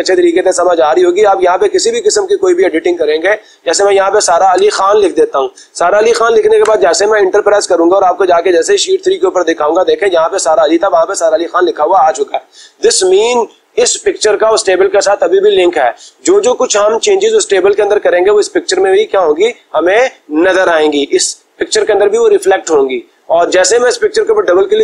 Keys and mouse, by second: 1.3 click, 3.4 click, 3.8 click, 4.6-6.1 typing, 6.7 Return, 9.0-10.0 drag, 24.2-24.8 drag.